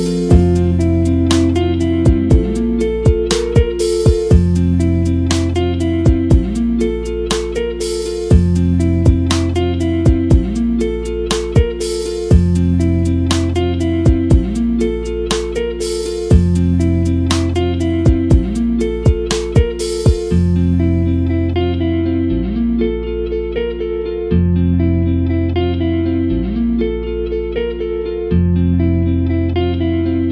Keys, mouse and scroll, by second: 0.4-1.9 scroll down 1, 1.9 scroll up 1, 4.9 scroll down 1, 5.3 middle drag, 5.6-6.3 scroll down 2, 5.8 middle click, 6.3 middle drag, 12.3 click, 12.7 KP_Decimal, 13.2 middle drag, 16.7 scroll, 17.5 click, 17.6 middle drag, 17.8 scroll up 1, 29.4 scroll up 1.